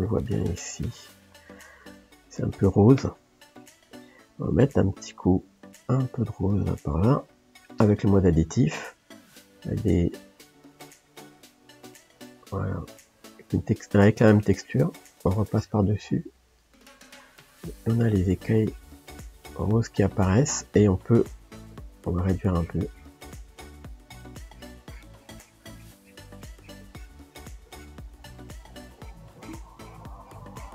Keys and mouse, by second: 3.2-6.1 middle drag, 6.1 click, 8.5 f, 9.6 click, 10.2 f, 11.4-16.8 drag, 16.8 shift+middle click, 17.4-21.2 drag, 21.2 f, 22.2-23.9 drag, 23.9 shift+middle click, 24.6-28.3 drag, 28.3 shift+middle click, 29.0-30.7 drag.